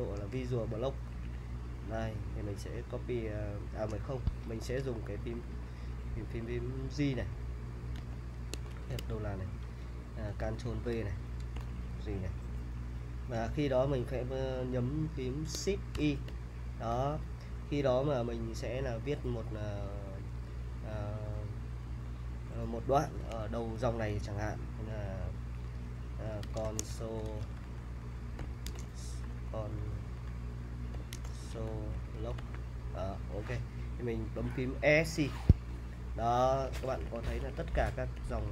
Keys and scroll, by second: 1.2-3.3 typing, 4.3 Escape, 5.0-8.8 typing, 10.7 ctrl+v, 11.6-12.5 typing, 16.0 l, 26.2-32.9 typing, 35.5 Escape, 36.4-38.5 typing.